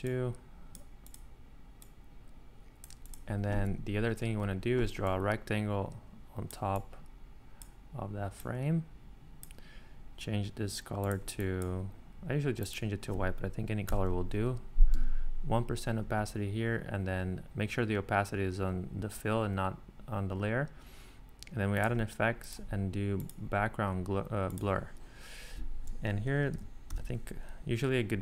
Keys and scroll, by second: 4.0 r, 13.9 1, 15.0 Tab, 26.2-27.4 typing.